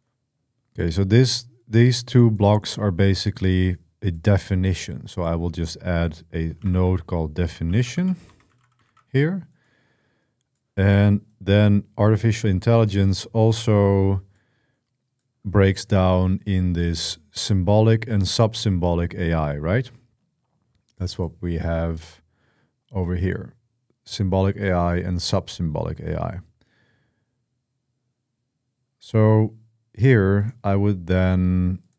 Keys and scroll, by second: 6.1-9.1 typing.